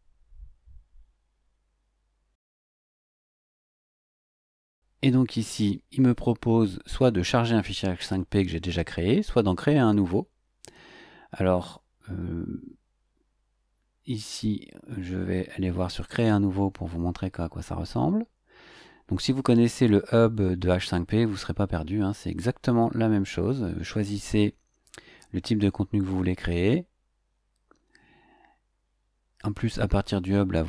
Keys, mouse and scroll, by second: 2.3-3.7 drag, 4.0-16.0 middle drag, 16.0 click, 23.9-24.9 scroll down 3, 26.0-26.4 scroll up 2, 26.4-27.3 scroll down 2, 27.3-27.7 scroll up 2.